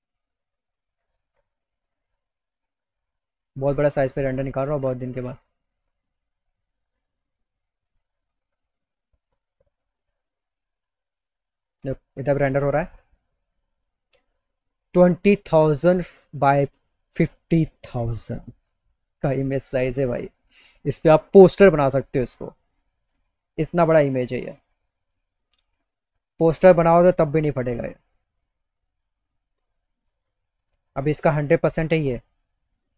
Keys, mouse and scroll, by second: 1.5 click, 23.2 middle click, 32.3 middle click, 32.4 click.